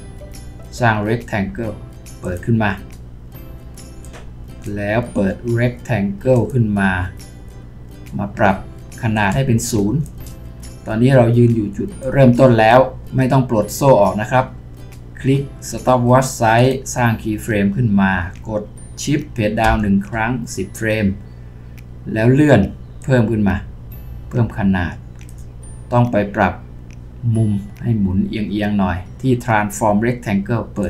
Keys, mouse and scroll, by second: 19.6 shift+Page_Down.